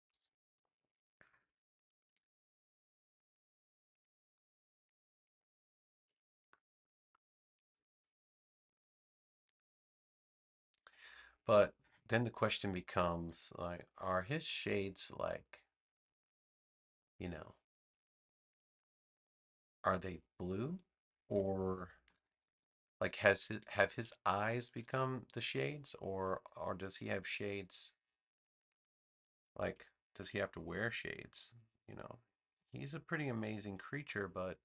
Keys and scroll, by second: 2.0 a, 22.0 super+-, 23.3 super+-, 24.4 super+=.